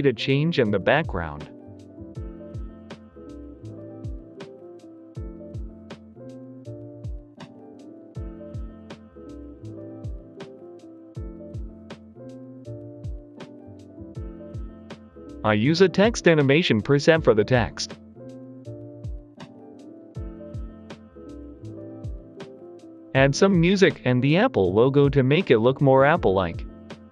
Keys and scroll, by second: 0.9 Return, 1.1-4.0 typing, 2.1 Return, 4.7 ctrl+shift+d, 4.8 Delete, 8.6 t, 9.5 0, 9.6 Return, 18.6 Escape, 20.3 BackSpace, 24.6 Escape.